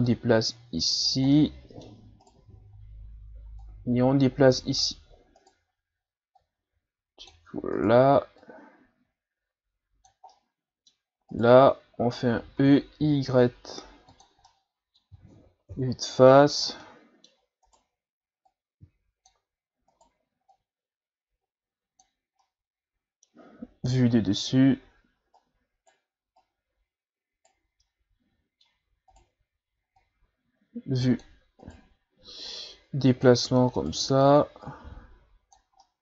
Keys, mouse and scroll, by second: 0.1-1.3 drag, 1.3 middle click, 2.2 right click, 2.7 scroll down 1, 3.6-5.3 drag, 5.3 right click, 6.4-7.8 drag, 7.8 right click, 8.4-10.3 drag, 10.3 middle click, 11.3 right click, 12.6 e, 14.5-15.7 middle drag, 15.7 KP_1, 16.6 scroll down 2, 16.8 middle click, 17.7 right click, 18.4 click, 19.9 right click, 20.5-22.4 drag, 22.4-23.9 middle drag, 23.9 KP_7, 24.9-25.3 scroll up 1, 25.3 right click, 26.4 right click, 27.8-29.1 middle drag, 29.1 right click, 30.0-31.6 drag, 31.6 right click, 32.5-33.8 drag, 33.8 right click, 34.4-35.8 drag, 35.8-36.0 middle drag.